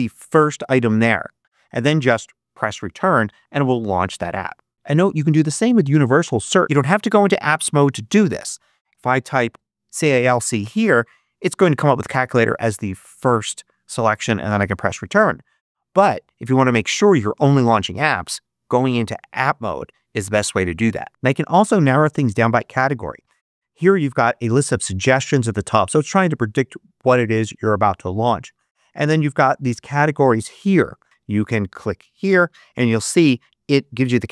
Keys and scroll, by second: 1.9 Return, 4.7 super+space, 6.4 super+space, 8.6-9.9 typing, 14.5 Return.